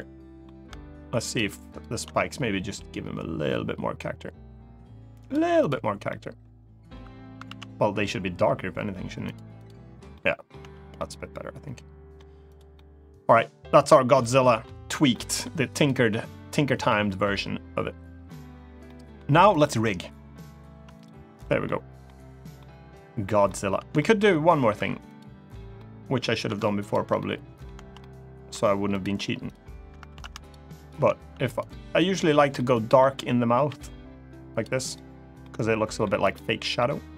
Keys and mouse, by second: 0.9 shift+click, 2.5 g, 4.9 click, 5.4 click, 5.8 middle click, 7.2 ctrl+z, 8.2 g, 9.0 click, 9.4 click, 9.9 middle click, 10.3 Tab, 10.7-11.9 middle drag, 12.2 click, 12.5-13.1 middle drag, 13.9 click, 14.2 middle drag, 14.8-15.2 middle drag, 15.8-16.4 middle drag, 16.7-18.0 middle drag, 18.6-18.9 middle drag, 20.7 click, 21.4 middle click, 22.3 middle click, 23.7 shift+middle click, 24.0 middle click, 25.4 3, 25.5 middle click, 26.6 click, 26.9 middle click, 27.7-28.8 middle drag, 29.2 shift+click, 29.9 ctrl+z, 30.2 click, 31.4 click, 32.3 middle click, 33.4 g, 34.3 click, 34.6 click, 35.2 middle click, 36.5 middle click.